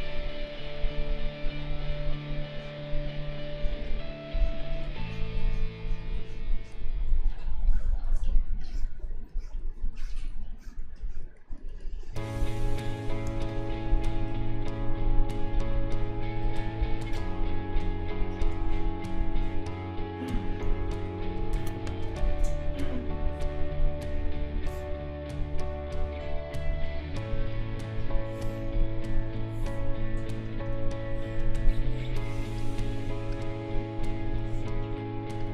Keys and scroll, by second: 7.5 space, 13.2 space, 20.6 ctrl+a, 21.8 ctrl+g.